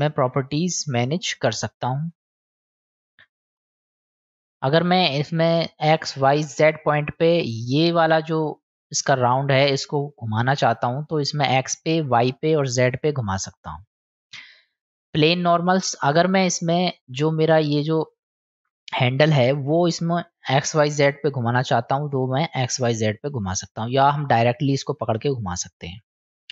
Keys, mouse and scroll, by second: 10.5-11.5 drag, 11.9 click, 12.8-13.9 drag, 15.7-17.3 drag, 21.4-23.4 drag.